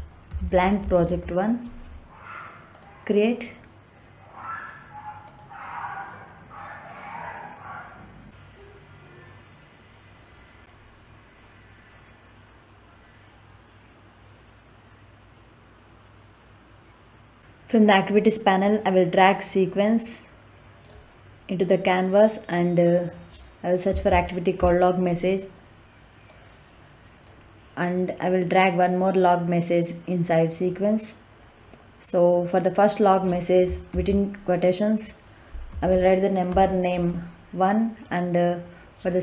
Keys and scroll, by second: 0.0-1.0 typing, 23.7 l, 24.0 o, 24.5 g, 33.8 shift+', 35.6 o, 35.8 n, 36.4 e.